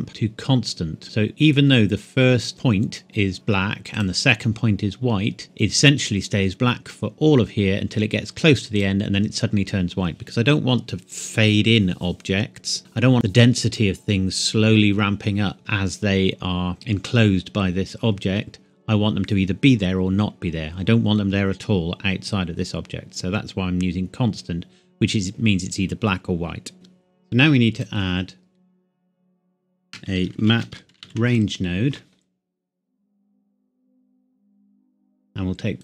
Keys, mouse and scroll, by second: 0.1 click, 2.5 click, 3.9 click, 8.7 click, 26.7 click, 30.3-31.3 typing, 32.9 click, 34.9-35.8 scroll up 1.